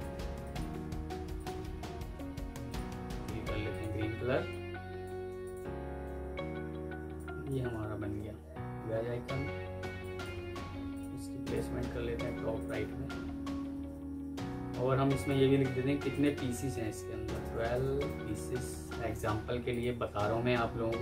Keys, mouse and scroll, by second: 0.3 ctrl+click, 5.8 typing, 6.7 Escape, 7.0 alt+click, 7.9 ctrl+g, 8.5 F4, 9.5 F2, 10.2 Escape, 11.3 shift+click, 11.6 typing, 12.1 Escape, 13.1 Down, 13.5 Left, 13.8 Escape, 16.6-18.2 typing.